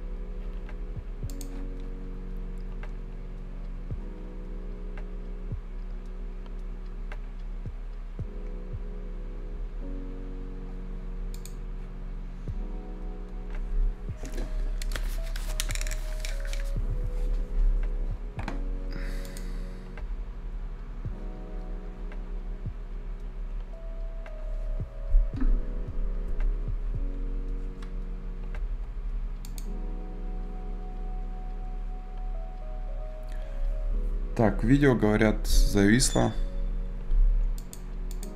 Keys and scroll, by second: 35.4 Escape.